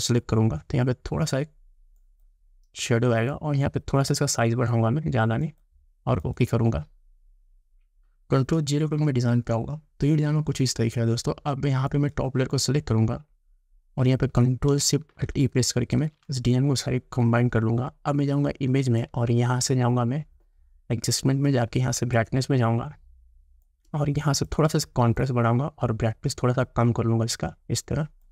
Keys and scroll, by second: 9.1 ctrl+0, 16.0 ctrl+alt+shift+e.